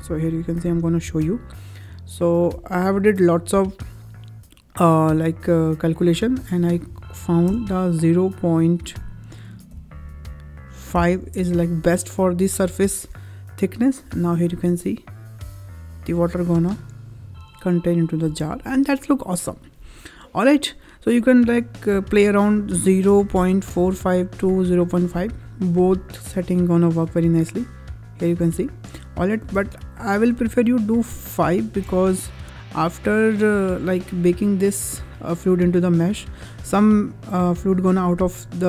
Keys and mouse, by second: 0.1-2.3 ctrl+drag, 5.9-11.7 drag, 13.8 click, 14.4 space, 18.1 space, 22.2-24.3 drag, 26.3-28.8 drag, 28.8 space, 29.3 space, 29.7 click, 31.3-32.7 drag.